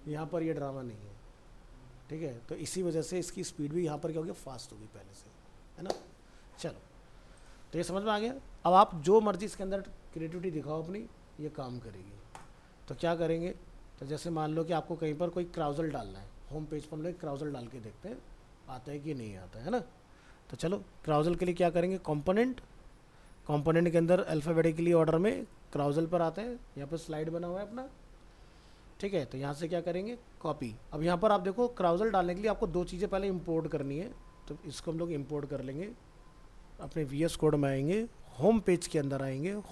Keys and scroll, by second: 35.8 ctrl+c.